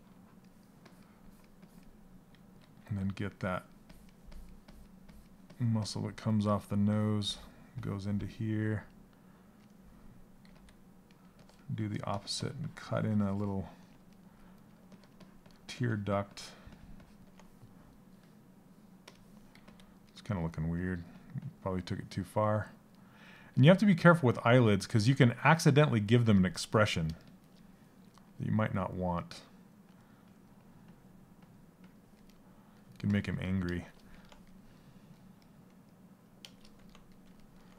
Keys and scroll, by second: 10.0 s, 19.1 s.